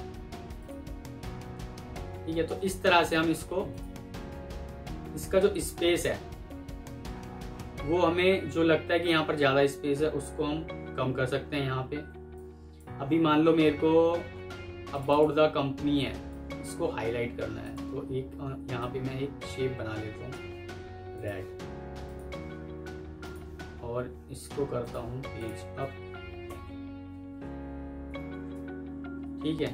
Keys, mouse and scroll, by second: 3.9 Escape, 5.8 F3, 6.9 alt+scroll up 1, 10.2 F3, 12.8 Escape, 14.0-14.4 alt+scroll up 1, 15.0 double click, 15.8 F2, 23.1 alt+click, 23.7 Escape, 26.3 shift+Page_Up, 27.3 Escape, 28.4 shift+Page_Up, 29.2 Escape.